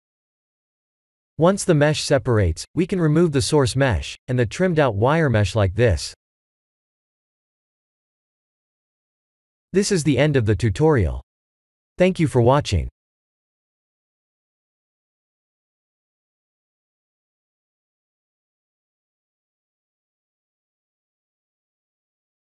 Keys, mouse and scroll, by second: 0.2 p, 2.3 Tab, 2.9 click, 4.2 shift+click, 5.0 x, 6.4 click, 7.1 KP_1, 7.4 KP_7, 14.6 middle click.